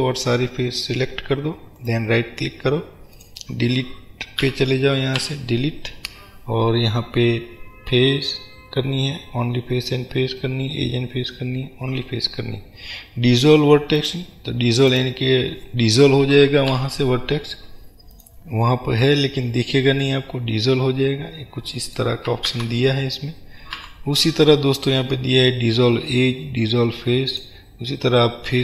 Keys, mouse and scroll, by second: 1.8-3.3 right drag, 3.3 click, 4.5 a, 14.1 click, 14.9 click, 16.8 Delete, 19.1-28.6 middle drag, 22.6 ctrl+z.